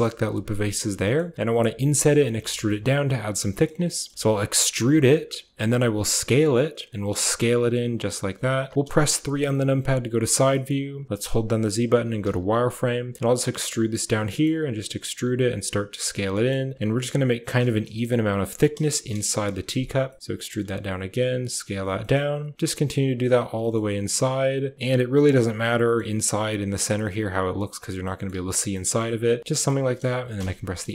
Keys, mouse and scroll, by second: 0.7 click, 0.9 shift+click, 2.3 shift+click, 2.5 click, 3.4 shift+click, 3.8 click, 4.5 e, 8.1-9.2 typing, 10.4 shift+click, 11.1 z, 13.0 e, 14.1 e, 15.3 s, 16.1 e, 16.7 s, 17.5 shift+middle click, 17.8 middle click, 18.8 KP_1, 19.2 KP_3, 19.9 e, 20.4 s, 21.8 e, 22.5 s, 23.4 e, 25.7 e, 26.2 s, 27.9 click, 28.2 z, 28.6 click, 30.2 f, 30.8 shift+click.